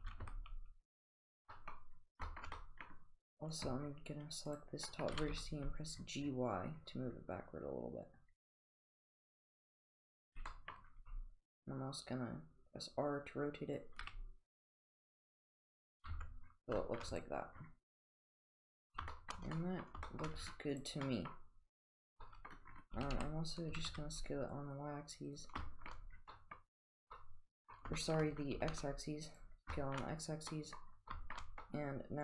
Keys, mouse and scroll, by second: 1.6 middle click, 2.3 middle drag, 2.6 middle drag, 3.5 click, 4.5 click, 4.9 middle drag, 5.2 g, 11.0 r, 16.1 Tab, 16.8 shift+middle click, 17.1 click, 17.2 click, 18.2 click, 19.1 shift+middle drag, 19.6 middle drag, 20.1 shift+middle click, 20.8 click, 21.1 middle drag, 22.3 middle drag, 23.0 s, 25.7 shift+middle drag, 26.3 middle drag, 27.2 middle click, 27.2-27.7 middle drag, 27.8 middle click, 28.0 shift+middle drag, 28.6 s, 29.7 shift+middle click, 30.5-30.8 middle drag, 31.1 shift+middle click, 31.7-32.2 middle drag.